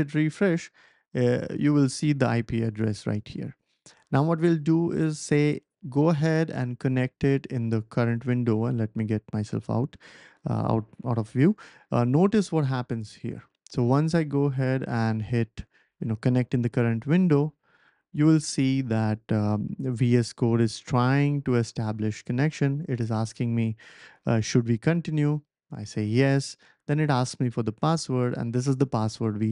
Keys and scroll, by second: 27.9 p.